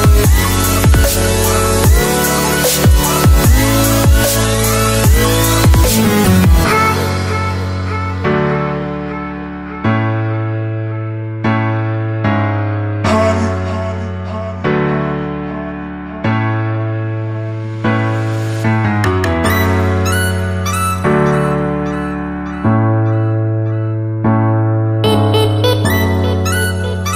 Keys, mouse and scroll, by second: 0.0 alt+scroll down 1, 0.5 click, 7.7 click, 15.5 click, 21.2 s, 23.2 click.